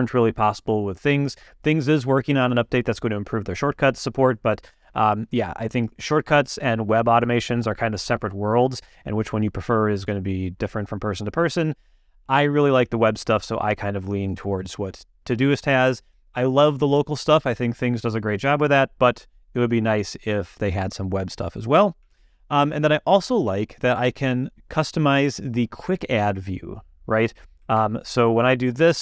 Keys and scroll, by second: 22.1 super+,, 27.7 ctrl+space.